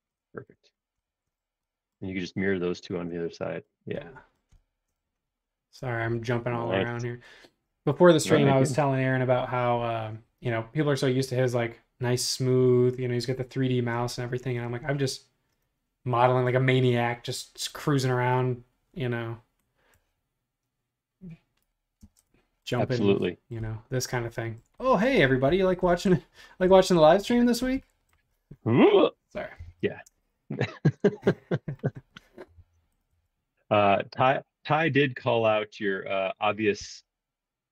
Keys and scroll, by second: 22.1 space, 29.5 m, 32.6 m, 36.8 q.